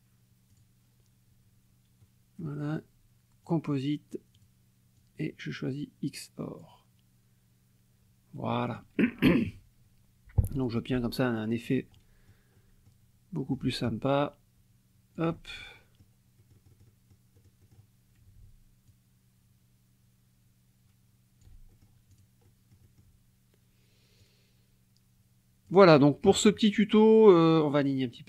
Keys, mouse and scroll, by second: 0.5 click, 2.0 click, 3.4 click, 4.3 click, 4.9 click, 6.6 click, 8.7 click, 9.3 KP_Subtract, 10.5 click, 11.6 click, 12.0 click, 12.6 click, 13.8-16.2 ctrl+shift+drag, 16.4 ctrl+shift+click, 17.3 click, 18.9-21.6 ctrl+shift+drag, 21.7 ctrl+shift+click, 22.1 ctrl+shift+click, 22.5 ctrl+shift+click, 24.2-25.9 drag, 26.3 KP_Subtract, 27.6-28.2 drag.